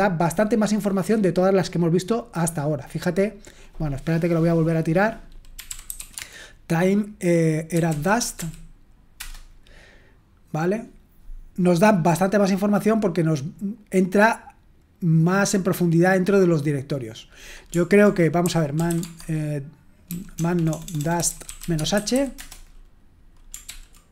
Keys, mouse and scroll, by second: 0.9-3.5 scroll up 2, 3.5-5.5 scroll down 2, 5.3-6.4 typing, 7.4-8.8 typing, 9.1 Return, 11.6-12.2 scroll up 1, 12.2-16.1 scroll down 1, 16.1 scroll up 2, 16.4-17.2 scroll down 2, 17.2 click, 18.2-23.9 typing, 23.6 ctrl+p.